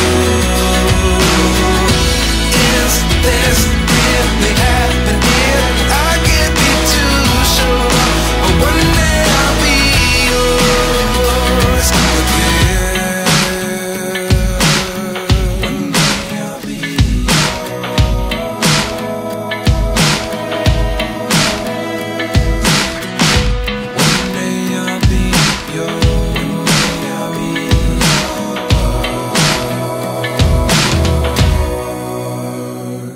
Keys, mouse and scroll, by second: 0.8 typing, 11.0-12.0 scroll up 1, 12.0 typing, 14.2 click, 14.2-15.7 typing, 18.2-19.5 typing, 23.6 typing.